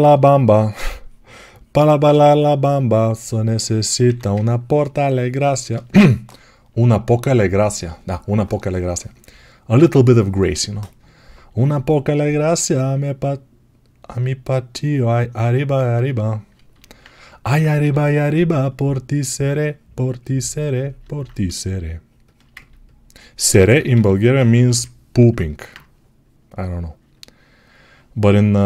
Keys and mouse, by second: 1.9-20.7 shift+right drag, 17.5-20.7 drag, 23.8 g, 24.4 g, 25.2-28.6 alt+right drag.